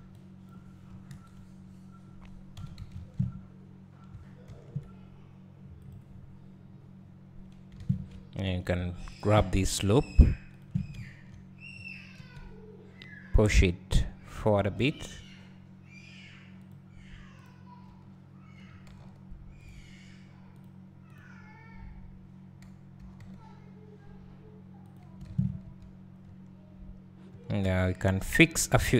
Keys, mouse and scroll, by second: 0.0 a, 0.5 b, 1.1 ctrl+KP_Add, 2.6 s, 5.9 click, 7.8 alt+a, 8.1 `, 9.2 alt+click, 10.6 alt+shift+click, 12.2 KP_3, 14.8 g, 16.7 click, 17.9 g, 20.6 click, 23.0 g, 24.9 click, 25.3 alt+a, 27.3-28.9 right drag.